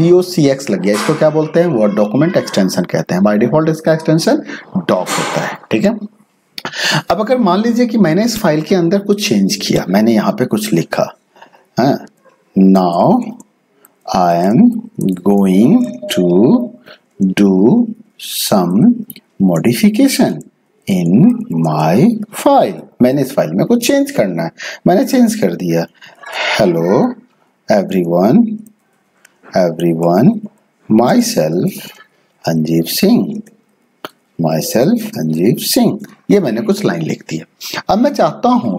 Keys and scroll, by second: 12.9-15.9 typing, 26.2-36.0 typing.